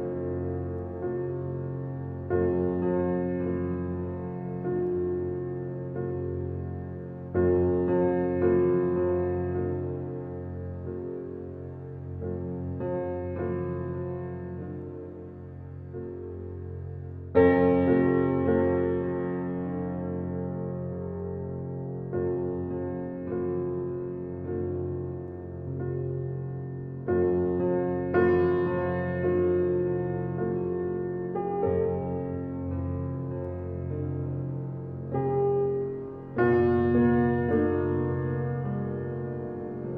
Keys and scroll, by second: 0.4 space, 4.0 Escape, 8.2 s, 14.1 ctrl+a, 20.3 space, 24.9 space, 28.1 g, 30.5 space, 33.6 space, 36.9 g.